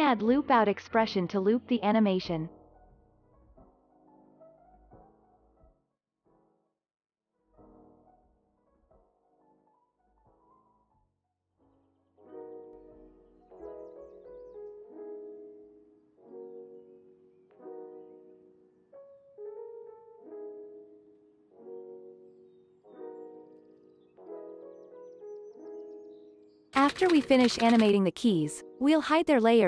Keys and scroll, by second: 1.6 l, 2.9 Down, 3.5 Return, 9.4 ctrl+v, 14.8 space, 17.1 space, 19.6 space, 22.3 space, 24.8 space, 25.2 ctrl+s, 28.2 ctrl+s.